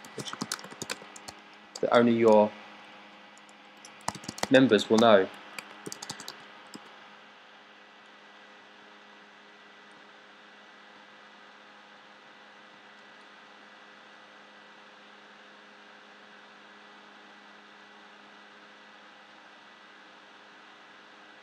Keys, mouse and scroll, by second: 0.0-1.9 typing, 3.9-7.1 typing, 9.4-10.1 drag.